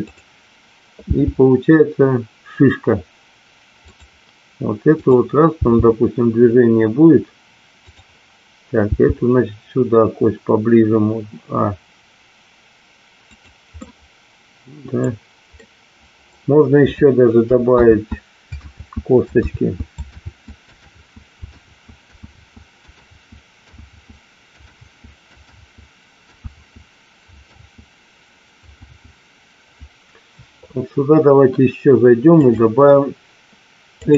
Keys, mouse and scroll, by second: 1.1 g, 5.7 g, 9.1 g, 13.8-14.9 middle drag, 15.6-17.3 middle drag, 18.0 ctrl+z, 18.9 ctrl+z, 19.7 ctrl+z, 20.5 ctrl+z, 21.1 ctrl+z, 21.8 ctrl+z, 22.4 ctrl+z, 23.2 ctrl+z, 24.1 ctrl+z, 25.7 ctrl+z, 26.7 ctrl+z, 29.1 ctrl+z, 32.3-34.1 drag.